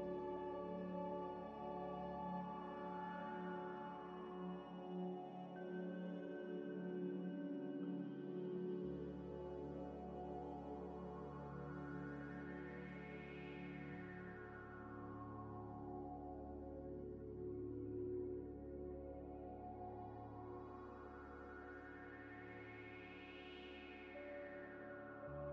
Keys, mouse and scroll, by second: 0.0 g, 0.1 z, 1.5 z, 1.9 middle click, 2.7 z, 3.0 scroll down 1, 3.3 z, 4.2 shift+a, 5.4 scroll down 1, 5.7-6.9 typing, 7.0 Return, 7.5 scroll up 1, 8.0 g, 8.8 scroll up 1, 9.0 scroll down 1, 9.0 scroll up 1, 10.7 s, 12.1 Tab, 15.2 g, 15.2 z, 17.3 s, 18.1 ctrl+z, 18.5 Tab, 19.4 g, 19.4 z, 20.1 Tab, 21.2 Delete, 23.0 Tab, 23.8 1, 24.5 Tab, 25.0 1, 25.4 a.